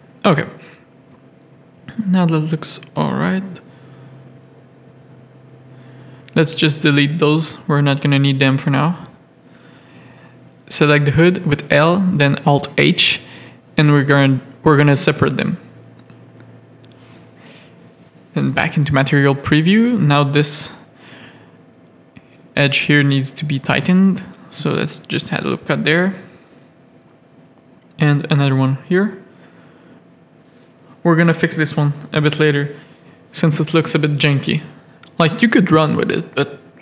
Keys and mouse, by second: 0.5 middle click, 1.3 middle click, 1.9 click, 2.8 ctrl+click, 3.9 ctrl+click, 5.0 x, 5.9 shift+middle click, 6.8 middle click, 7.2 shift+middle click, 7.5 middle click, 9.0 l, 9.5 middle click, 10.8 alt+h, 12.4 middle click, 12.7 z, 13.0 middle click, 13.3 z, 14.3 middle click, 15.5 Tab, 15.8 alt+a, 16.2 middle click, 16.7 z, 17.0 middle click, 18.5 z, 19.1 Tab, 20.1 ctrl+r, 22.4 Tab, 22.6 middle click, 23.5 ctrl+Tab, 23.7 ctrl+r, 27.3 Tab, 27.5 click, 28.0 ctrl+Tab, 28.1 ctrl+r, 29.4 Tab, 29.8 alt+a, 30.2 z, 31.1 middle click, 32.4 KP_3, 34.1 Tab, 34.5-36.3 typing.